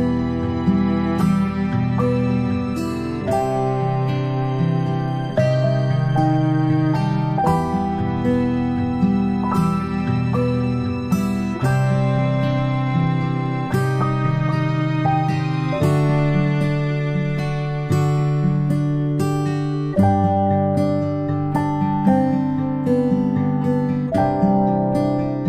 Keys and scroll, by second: 10.6 ctrl+z, 17.6 ctrl+space, 17.9 ctrl+space, 17.9 ctrl+space, 24.9 ctrl+z.